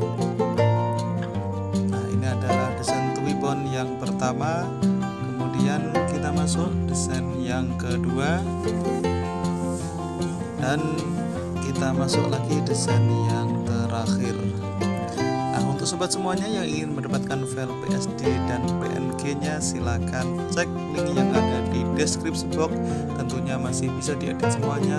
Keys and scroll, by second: 7.8 b, 16.4 4, 24.8 g.